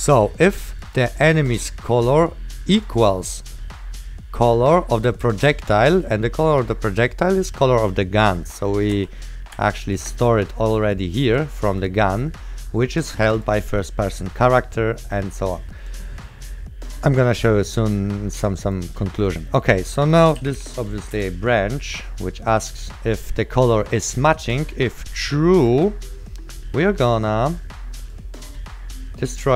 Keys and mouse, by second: 3.0 click, 6.5 click, 8.8 right click, 9.4 click, 16.0 click, 19.1 right click, 20.0 click, 20.2-21.3 typing, 21.3 KP_Enter, 21.8 click, 23.9 right click, 25.8 click, 25.8 right click, 27.2 click, 27.2 right click, 28.2 click.